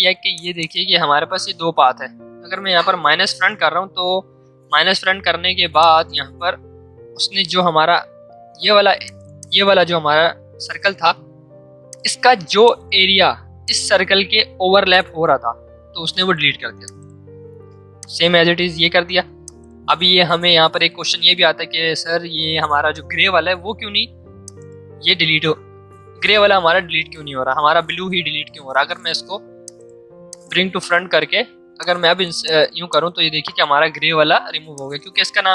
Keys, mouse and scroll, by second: 3.2 click, 5.7 click, 8.2 ctrl+z, 9.0 click, 11.9 shift+click, 16.8 shift+click, 19.0 ctrl+z, 19.4 click, 24.4 click, 28.7 right click, 29.6 click.